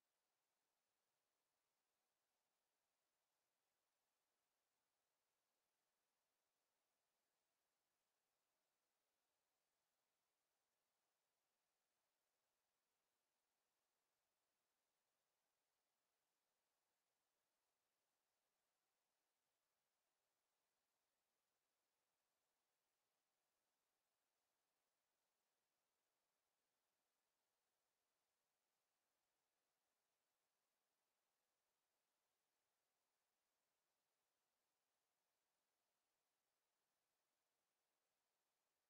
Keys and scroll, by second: 10.1 Escape, 29.1 Escape.